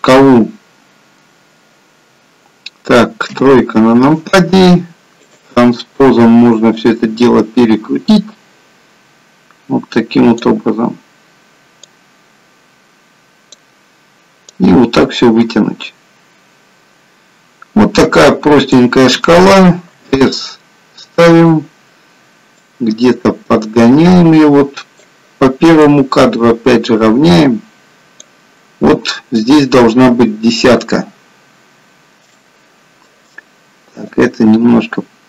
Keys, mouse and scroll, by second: 3.3 KP_3, 5.3 click, 6.9 click, 11.9 click, 14.5 click, 20.0 s, 22.6 click, 26.1 click, 32.5 shift+middle click, 34.2 click.